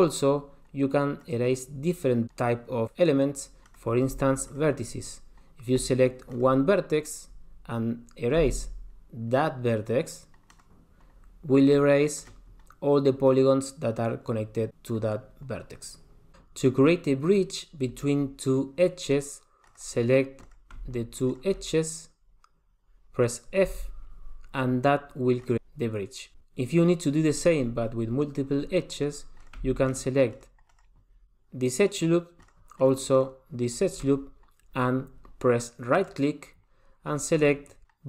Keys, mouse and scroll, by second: 1.4 click, 3.8 click, 4.7 shift+click, 6.5 click, 7.7 click, 8.6 x, 11.9 middle click, 19.7 click, 20.4 click, 21.3 shift+click, 21.7-22.9 scroll up 3, 23.7 f, 24.5-25.4 scroll down 2, 25.4 click, 26.6 click, 29.6 click, 30.1 shift+click, 30.5 shift+click, 30.9 shift+click, 32.6 shift+click, 33.0 shift+click, 33.3 shift+click, 33.8 shift+click, 36.1 right click.